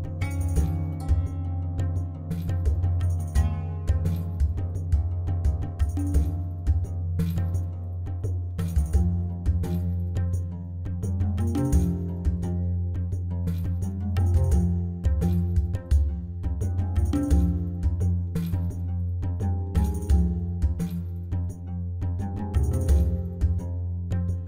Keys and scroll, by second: 0.0-0.4 typing, 1.0 Tab, 2.8 shift+a, 4.5 Tab, 5.2-6.8 typing, 7.9 shift+z, 9.1 s, 10.1 s, 10.8 g, 13.3 s, 13.7 g, 14.9 s, 16.2 s, 16.7 g, 17.7 g, 19.1 s, 19.5 g, 20.1 shift+z, 22.4 a.